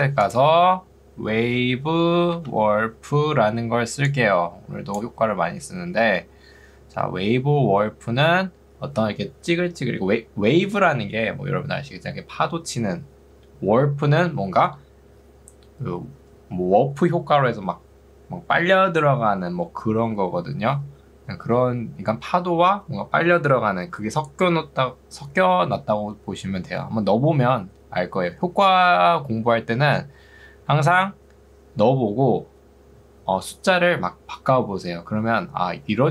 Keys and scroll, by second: 0.7-3.4 typing, 3.9 ctrl+2, 7.9 Escape.